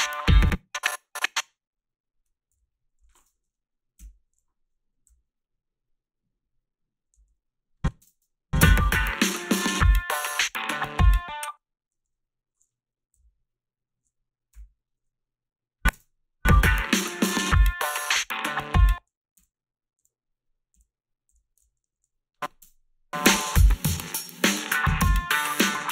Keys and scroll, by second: 0.2 space, 2.5 g, 4.0 Delete, 7.2 a, 8.0 space, 11.3 space, 13.2 t, 15.9 space, 18.7 space, 19.4 ctrl+z, 20.8 ctrl+z, 21.3 ctrl+z, 21.8 ctrl+z, 21.8 a, 22.6 space.